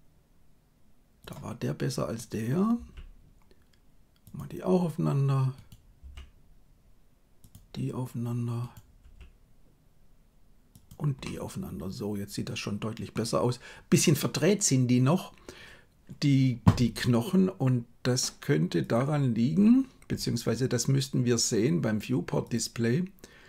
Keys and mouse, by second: 2.9 g, 5.5 right click, 6.1 g, 8.9 g, 11.1-13.1 middle drag.